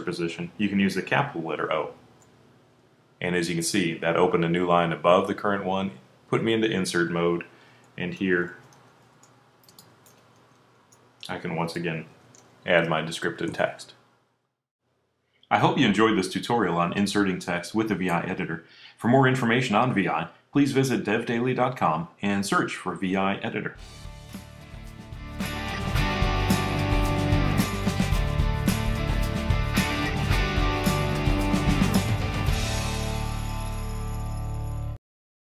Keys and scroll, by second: 1.1 o.